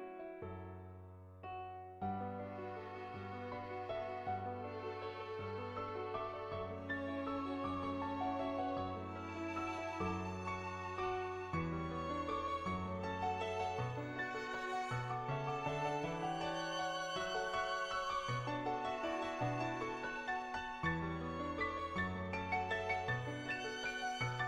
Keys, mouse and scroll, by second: 2.3 click, 2.9 click, 3.6 ctrl+z, 3.7 ctrl+z, 4.2 click, 5.8 ctrl+z, 6.4 ctrl+z, 6.4 ], 6.6 click, 7.0 click, 7.4 ctrl+z, 7.5 click, 7.8 click, 8.4 click, 12.3 middle click, 13.0 shift+middle click, 14.1 middle click, 14.5 shift+middle click, 14.7 middle click, 15.0 middle click, 16.0-17.1 drag, 17.9-19.1 middle drag, 19.8 click, 20.0 click, 20.5 click, 20.8 click, 21.1 click, 21.6 click, 22.1 click, 22.6 click, 23.6 click, 23.9 ctrl+z.